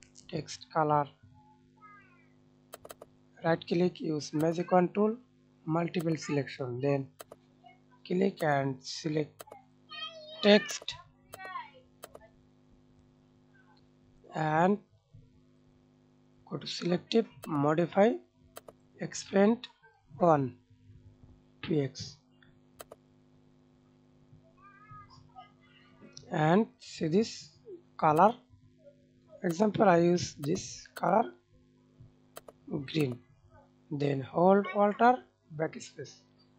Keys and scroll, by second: 34.6 alt+BackSpace.